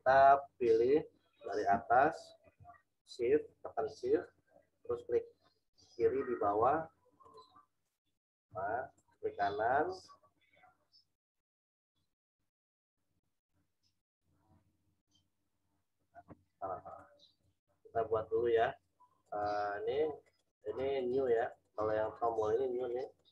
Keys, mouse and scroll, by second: 7.2 shift+click, 8.9 right click, 17.2 click.